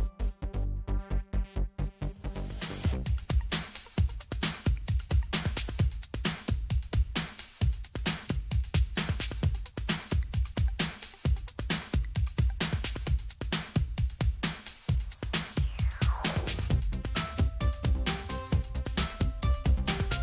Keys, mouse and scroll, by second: 1.0 click, 3.9 click, 6.7 click, 8.4 click, 11.3 click, 12.8 click, 15.5 click, 17.8 click.